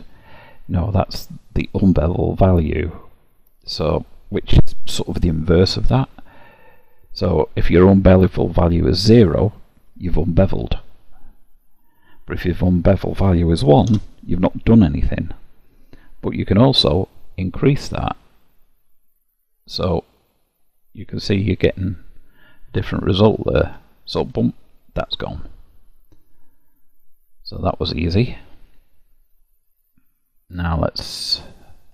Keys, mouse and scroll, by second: 9.8 click, 16.8 click, 25.1 click, 26.6 middle click, 31.4 click.